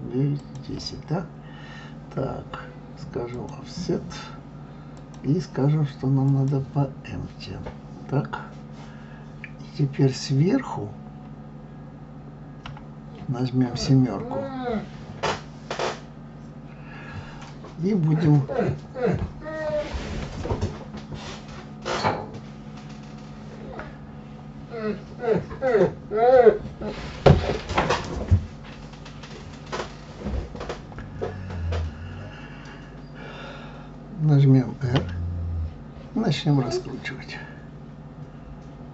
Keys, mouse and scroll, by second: 3.3 click, 5.0-8.0 drag, 12.6 KP_7, 35.0 r.